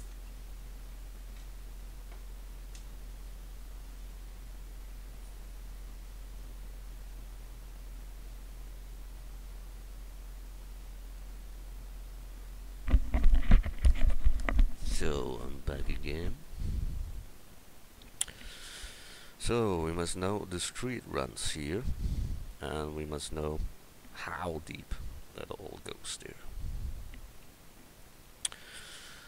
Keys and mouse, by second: 26.7 KP_1, 26.9 click.